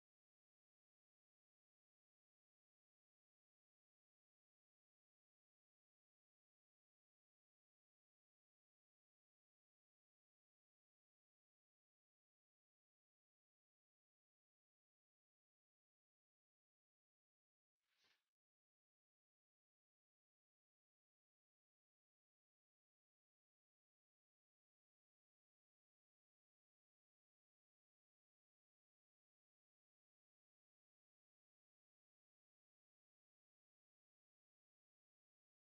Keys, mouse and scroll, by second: 0.1 shift+click, 1.3 alt+middle click, 1.6 alt+click, 2.2 shift+click, 2.4 alt+click, 2.6 alt+middle click, 2.9 shift+click, 3.2 shift+click, 3.4 alt+middle click, 3.5 alt+click, 3.8 shift+click, 4.1 shift+click, 4.5 alt+middle click, 4.6 alt+click, 4.8 shift+click, 5.2 shift+click, 6.3 alt+middle click, 7.4 right click, 9.3 alt+click, 9.8 alt+click, 12.3 alt+click, 15.7 double click, 16.1 alt+click, 16.6 alt+middle click, 17.0 alt+click, 17.4 alt+middle click, 18.3 alt+click, 21.0 scroll up 1, 21.3 alt+middle click, 21.7 alt+click, 25.7 double click, 26.2 scroll down 1, 26.9 alt+middle click, 27.3 alt+click, 31.6 alt+click, 32.4 right click, 34.3 double click.